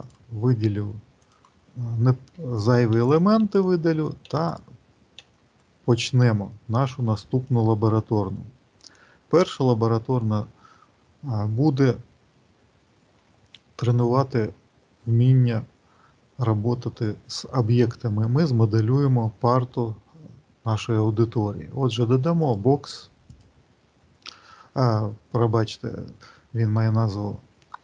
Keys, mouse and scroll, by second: 1.2 click, 2.2 Delete, 2.6 click, 3.1 Delete, 3.1 click, 4.1 Delete, 4.3 click, 5.1 Delete, 22.2 click.